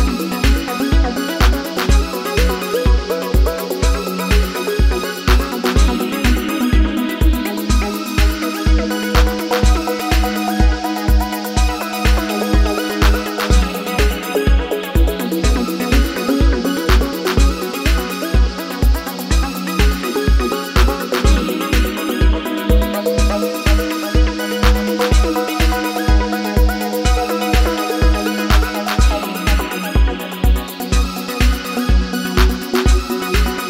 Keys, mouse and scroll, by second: 3.3 ctrl+0, 12.3 double click, 17.6 2.